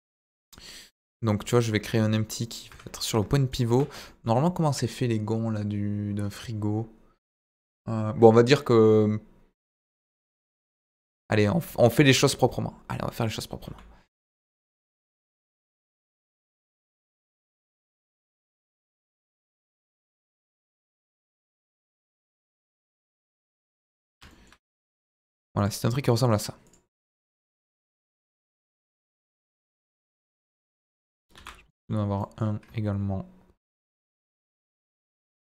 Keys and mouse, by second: 1.7 KP_7, 2.3 middle drag, 2.6 Tab, 3.9 Tab, 4.0 middle click, 9.9 KP_1, 10.5 KP_7, 11.9 shift+a, 13.6 s, 15.5 click, 15.9 KP_1, 16.7 s, 16.9 z, 17.7 click, 18.0 s, 18.4 click, 18.9 g, 19.9 ctrl+click, 20.2 middle click, 21.7 g, 21.8 middle click, 23.3 drag, 23.5-23.9 middle drag, 26.3 right click, 27.4 click, 29.4 middle drag, 30.0 KP_1, 31.3 shift+d, 32.1 middle click, 34.2 Escape, 35.0 g, 35.0 middle click.